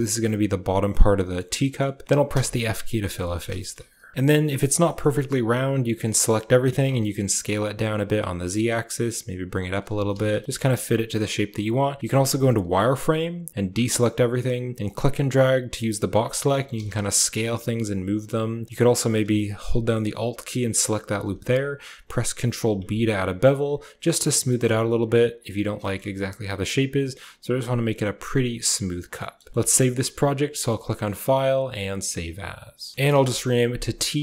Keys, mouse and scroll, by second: 0.8 click, 1.5 click, 1.7-2.1 typing, 2.0 click, 2.9 shift+click, 3.1 click, 3.4 shift+click, 4.1 KP_1, 4.7 shift+click, 5.5 a, 5.7 a, 6.5 s, 8.4 g, 9.8 s, 12.0 z, 13.6 a, 14.8 click, 16.1 s, 16.5 g, 20.7 alt+click, 22.4 ctrl+b, 24.5 a, 25.7 shift+click, 29.0 click, 29.3 z, 29.5 shift+click, 30.4 shift+middle click, 31.4-32.8 drag.